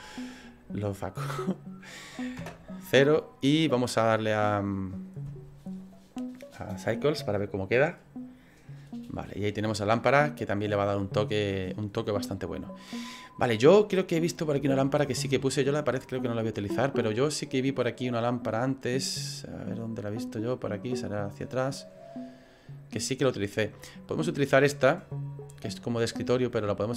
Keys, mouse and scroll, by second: 0.8 click, 2.4 KP_0.